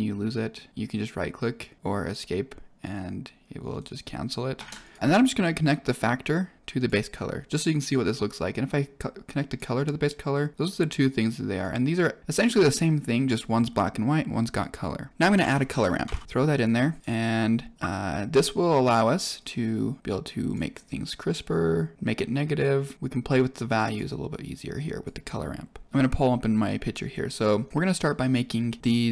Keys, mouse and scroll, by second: 4.5 shift+a, 5.0 click, 5.9 click, 8.6 click, 10.5-11.6 drag, 15.1 click, 15.3 shift+a, 16.2 r, 16.9 click, 19.3-20.5 drag, 21.2-22.9 drag, 23.4-23.9 drag, 24.7 click.